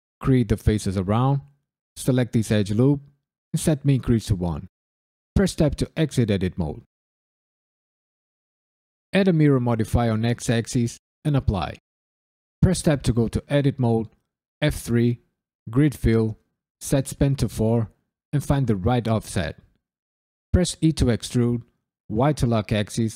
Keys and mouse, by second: 0.0 KP_Decimal, 0.3 click, 0.8 f, 0.9 drag, 1.0 shift+click, 1.1-1.7 f, 2.0 alt+click, 2.9 shift+e, 3.5 KP_1, 4.2 KP_Enter, 5.3 Tab, 5.9 KP_Decimal, 7.8-9.1 drag, 10.5-11.4 drag, 12.5 Tab, 13.2 KP_Decimal, 14.6 F3, 16.8 click, 19.0 click, 19.3 click, 19.9 middle click, 20.8 e, 22.1 y.